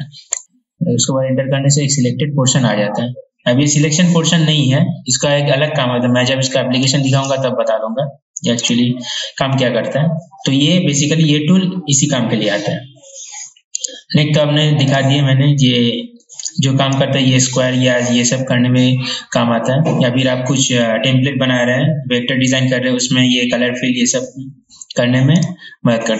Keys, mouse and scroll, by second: 0.4 Return, 7.0 click, 13.9 right click, 15.0 click.